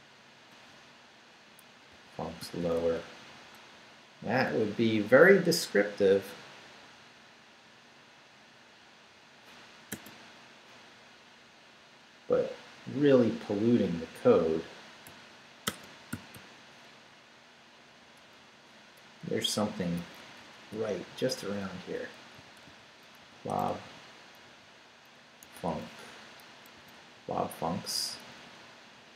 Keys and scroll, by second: 0.2 BackSpace, 1.2 Up, 1.6 Down, 1.7-3.6 typing, 9.9 space, 15.0 =, 15.6 space, 16.1 [, 16.3 ], 17.0 Left, 18.4 Up, 19.2 BackSpace, 22.1-25.4 typing, 26.7 s, 27.1 Down, 27.7 Right.